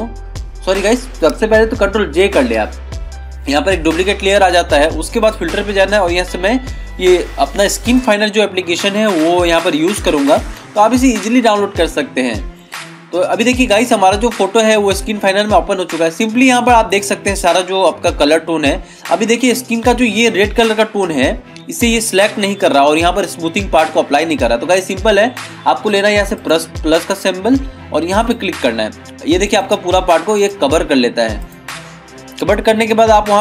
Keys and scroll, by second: 2.5 ctrl+j.